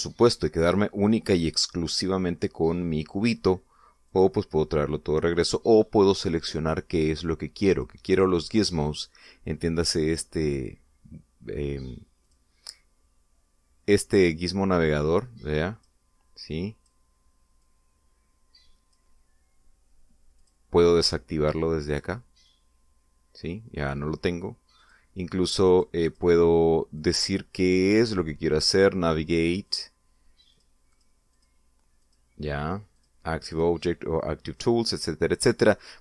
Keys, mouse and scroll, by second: 0.0 click, 1.3-3.1 middle drag, 4.8 click, 6.1 click, 8.5 click, 9.6 click, 13.0 click, 15.5-16.8 drag, 17.3 click, 18.4-19.9 drag, 21.1 click, 22.7 click, 25.6 click, 26.5-27.1 drag, 27.7 click, 28.5 click, 29.3 click, 30.4 click, 31.3 click, 31.7 click, 32.1 click, 32.8 click, 33.7 click, 34.3 click.